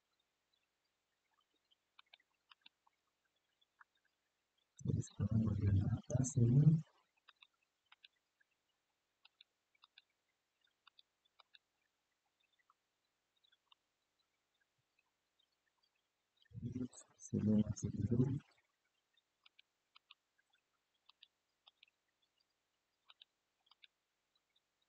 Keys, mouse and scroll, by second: 1.7 alt+shift+click, 2.2 alt+shift+click, 2.9-4.6 scroll down 2, 4.6-5.4 middle drag, 5.8-6.6 scroll up 2, 7.0 alt+shift+click, 7.6 alt+shift+click, 8.9 alt+shift+click, 9.5 alt+shift+click, 10.6 alt+shift+click, 11.1 alt+shift+click, 12.0-12.7 scroll down 1, 12.7 scroll down 1, 13.4-16.1 middle drag, 16.8 scroll up 1, 19.1 alt+shift+click, 19.6 alt+shift+click, 20.8 alt+shift+click, 21.4 alt+shift+click, 22.8 alt+shift+click, 23.4 alt+shift+click.